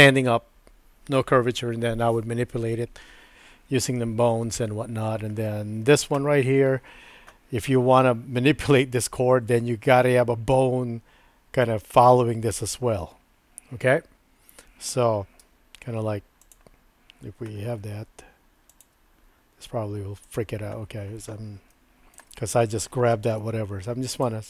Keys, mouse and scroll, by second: 15.4 Tab, 16.5 click, 17.8 e, 18.9 e, 21.8 shift+middle click, 23.4 e, 24.3 e.